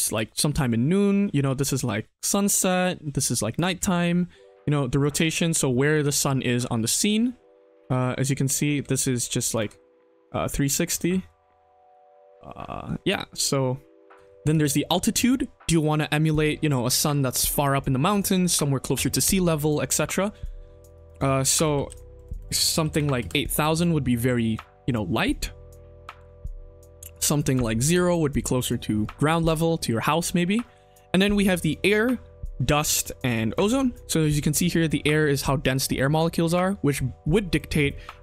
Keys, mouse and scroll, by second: 3.7 ctrl+z, 4.5-6.0 drag, 6.3-7.6 middle drag, 7.8 ctrl+z, 8.3 middle click, 8.8 KP_1, 9.5 click, 9.6 KP_1, 10.2 click, 12.2 middle click, 12.6 scroll down 1, 13.4 click, 14.1 ctrl+z, 14.5 ctrl+z, 20.0-23.2 drag, 22.3 BackSpace, 22.4 BackSpace, 22.8 KP_0, 22.9 KP_0, 24.0 middle click, 26.5 middle click, 27.1 click, 36.8-37.6 drag.